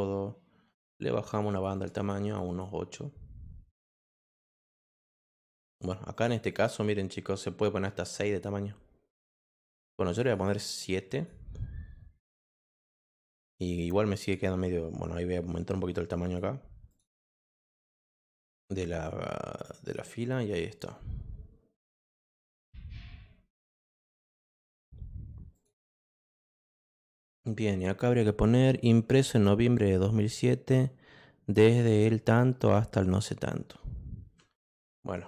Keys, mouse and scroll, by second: 1.3 click, 1.5 click, 1.7 click, 1.9 click, 2.2 click, 2.4 click, 4.0-5.7 drag, 6.1 click, 6.3 click, 6.5 click, 8.3 click, 10.2 click, 11.1 click, 12.5-13.6 drag, 14.2 click, 15.3-16.3 drag, 16.9 click, 18.2 click, 19.0-20.4 drag, 20.6-24.6 drag, 25.5 click.